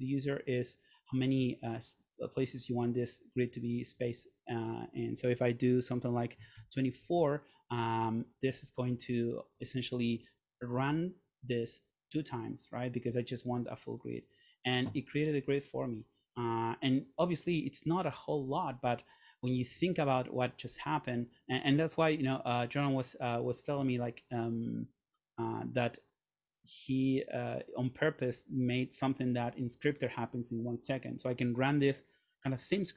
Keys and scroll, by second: 6.2-7.1 typing.